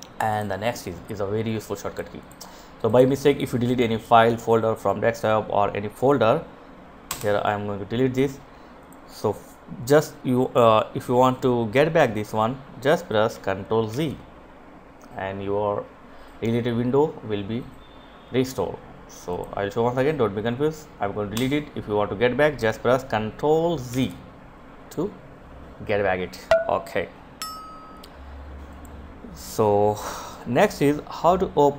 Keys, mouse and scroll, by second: 6.2 Delete, 7.9 click, 13.0 ctrl+z, 18.4 click, 20.5 Delete, 23.0 ctrl+z, 27.8 click.